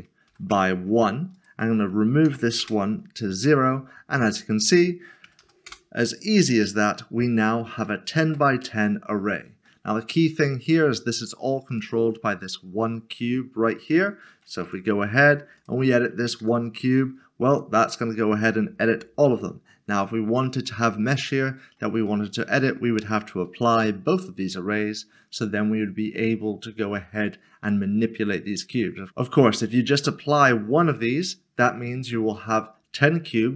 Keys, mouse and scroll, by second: 0.3 typing, 0.5 Return, 1.3 click, 2.3 typing, 2.6 Return, 4.5 click, 5.3 typing, 5.7 Return, 6.8 middle click, 7.4 scroll down 1, 7.9 shift+middle click, 8.8 shift+middle click, 11.7 click, 14.6 click, 16.8 typing, 17.5 click, 17.9 middle click, 19.3 ctrl+z, 21.4 scroll up 1, 22.0 scroll up 1, 22.3 middle click, 23.2 shift+middle click, 32.6 shift+middle click, 32.8-33.5 scroll down 1.